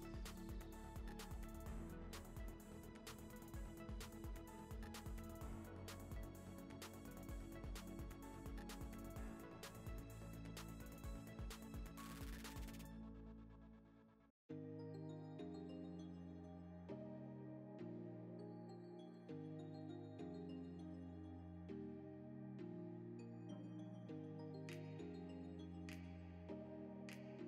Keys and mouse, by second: 0.0 click, 0.2 middle drag, 0.9 ctrl+s, 2.0 shift+s, 3.2 shift+a, 4.3 g, 4.7 click, 5.1 g, 5.4 click, 6.6 click, 7.3 click, 7.7 n, 8.1 ctrl+s, 9.6 click, 9.9 click, 10.2 click, 10.9 click, 11.2 click, 12.8 KP_0, 13.3 shift+middle drag, 13.7 shift+middle click, 14.6 click, 14.9-15.9 drag, 15.9 r, 16.6 r, 17.4 r, 18.5 g, 19.5 click, 20.7 click, 21.0 click, 21.3 KP_0, 21.8 click, 22.1 KP_0, 22.9 g, 23.6 click, 24.9 ctrl+s, 25.4-27.4 typing.